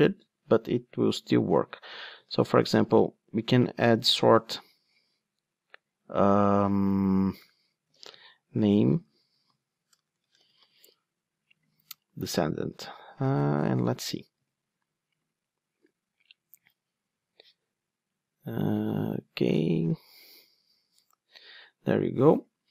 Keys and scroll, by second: 14.4 ctrl+d, 15.2 super+F8, 19.8 ctrl+d.